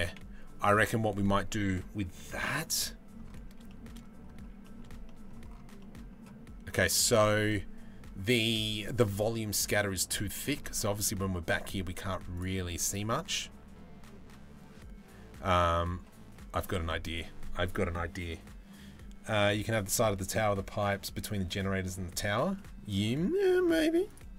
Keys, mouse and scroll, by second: 2.5 middle click, 3.3 shift+middle drag, 4.7 middle click, 5.4 middle click, 22.2 middle click.